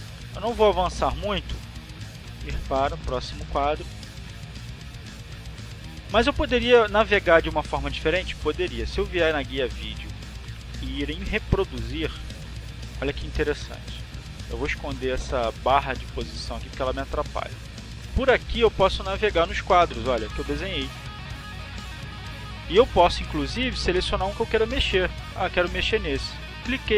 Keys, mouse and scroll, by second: 0.4 click, 3.0 click, 3.9 click, 9.0 click, 11.8 click, 13.5 click, 14.3 click, 16.1 click, 16.8 click, 17.3-18.5 drag, 25.7 click.